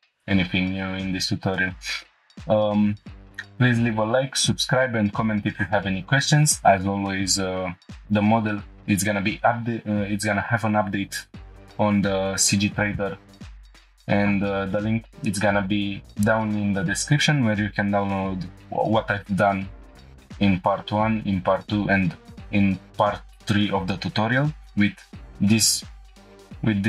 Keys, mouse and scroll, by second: 26.2 \.